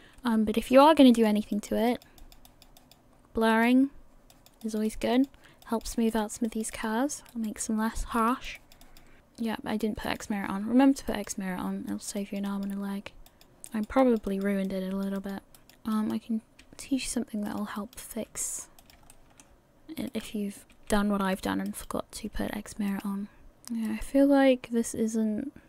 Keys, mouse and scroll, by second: 0.7 f, 1.5 click, 1.9 click, 2.4 click, 2.5 click, 2.8 click, 3.7 right click, 4.3 click, 4.6 click, 5.6 click, 6.2 click, 6.5 click, 7.6 click, 7.6 right click, 8.0 click, 8.3 click, 9.2 ctrl+z, 9.2 click, 10.1 click, 11.4 right click, 11.9 click, 12.2 click, 13.1-13.4 click, 13.3 click, 13.4 right click, 13.7 click, 14.0 click, 15.2 click, 15.6 right click, 15.6 r, 16.2 right click, 16.6 r, 18.0 right click, 18.3 r, 19.1 shift+middle click, 20.4 right click, 20.8 r, 21.9 right click, 22.3 r, 23.5 right click, 24.1 right click.